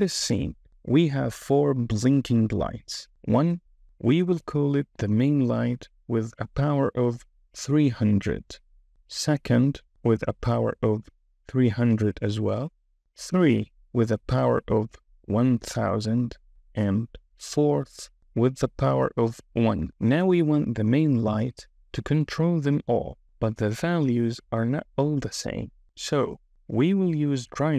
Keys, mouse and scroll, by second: 2.2 KP_3.